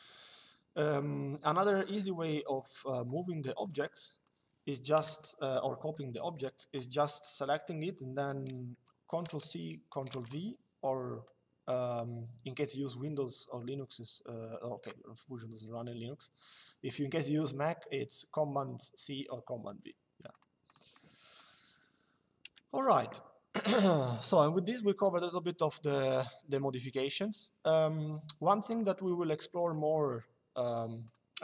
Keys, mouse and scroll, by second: 0.6 click, 3.3 click, 4.6 Delete, 5.6 click, 11.0 click, 20.0 click, 22.1 Delete, 24.4 click, 26.9 click, 28.4 click, 30.7 click.